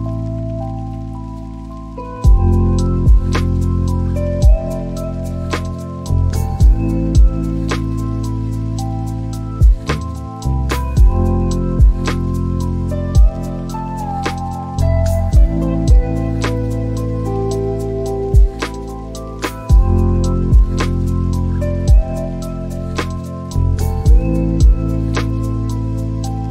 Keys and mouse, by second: 3.4 Return, 7.7 r, 9.6 y, 20.4 ctrl+click, 21.6 r, 26.2 ctrl+click.